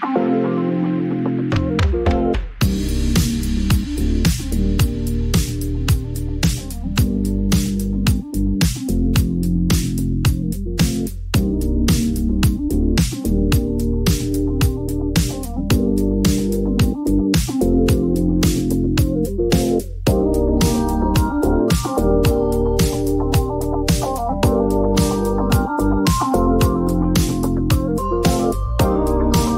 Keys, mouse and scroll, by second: 0.0-2.0 typing, 3.3 click, 3.4 click, 4.8 u, 7.7 click, 7.8-8.8 typing, 8.4-10.2 drag, 10.0-10.7 typing, 12.4-15.0 drag, 12.5-13.4 typing, 13.4 Return, 16.7 click, 18.2 click, 18.9 F9, 20.1 click, 20.3 s, 21.7 click, 22.0-22.9 typing, 24.7 click, 26.5 click, 26.9 F9, 26.9 click, 27.2 right click, 28.6 click, 29.0-29.5 typing.